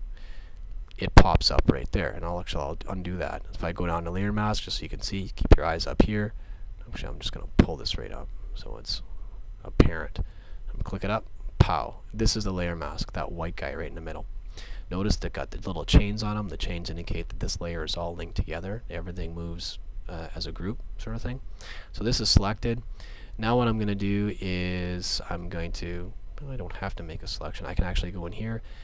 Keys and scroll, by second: 2.3 super+z.